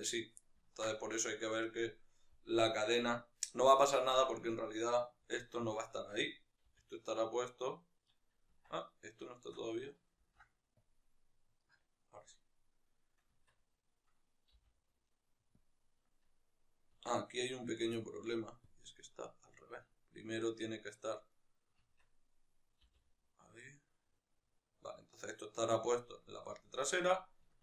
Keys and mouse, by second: 0.0 right click, 0.2-3.4 ctrl+middle drag, 2.1 g, 3.4 right click, 3.8 shift+middle click, 4.2 right click, 5.3 alt+q, 5.6-8.0 shift+middle drag, 6.4 g, 8.0 right click, 8.4 Tab, 8.6-9.2 right drag, 10.7 ctrl+p, 11.3-13.1 right drag, 13.1 Tab, 13.5-14.3 right drag, 14.3 g, 15.5 click, 16.8 Tab, 17.1-19.7 right drag, 19.7-21.0 drag, 21.0-21.7 right drag, 21.7 Tab, 22.8 r, 25.8 click, 26.3-27.6 middle drag.